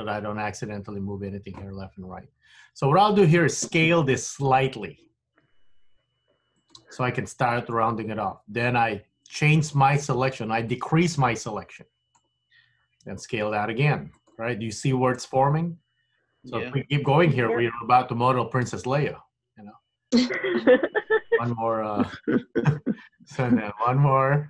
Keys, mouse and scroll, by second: 2.5 l, 5.5 s, 10.8 click, 13.1 s, 23.4 click.